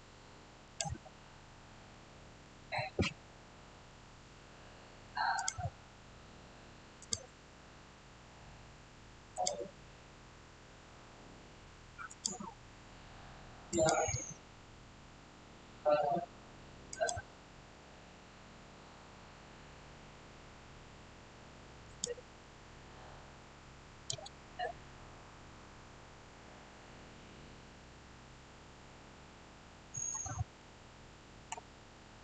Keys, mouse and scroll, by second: 0.5 click, 1.1 scroll, 1.8 middle click, 2.7-4.0 scroll down 1, 5.2 scroll down 1, 5.3 click, 9.2 click, 12.0 click, 16.8 click, 21.7 click, 24.5-25.2 scroll down 1, 26.9-27.2 scroll up 1, 30.0-31.7 middle drag, 31.7 shift+scroll down 1, 31.8-32.2 shift+middle drag.